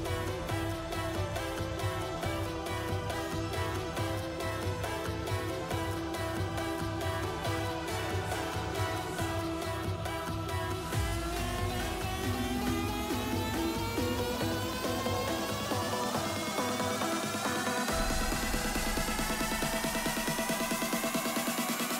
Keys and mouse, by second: 0.5 space, 0.9 ctrl+z, 1.5-3.0 drag, 7.9-9.1 alt+drag, 10.7 i, 11.1 space, 12.7 space, 13.1 ctrl+z, 13.7 ctrl+z, 14.1 ctrl+s, 14.7-17.9 drag, 19.6 s.